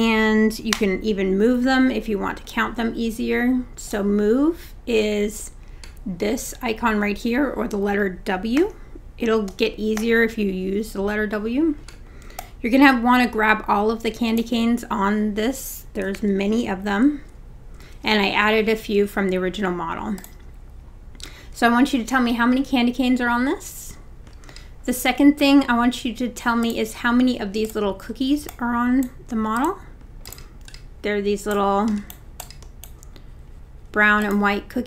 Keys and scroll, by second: 0.8 w, 8.6 w, 16.2 super+z.